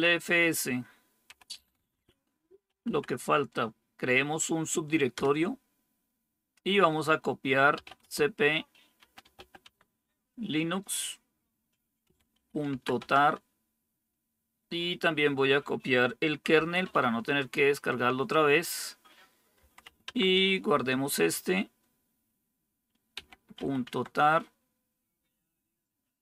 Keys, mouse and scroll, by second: 0.0-3.1 typing, 4.8-5.5 typing, 7.4-10.0 typing, 11.7-13.1 typing, 16.4 typing, 16.7 Tab, 19.5-20.2 typing, 22.8-24.0 typing, 26.0-26.2 typing.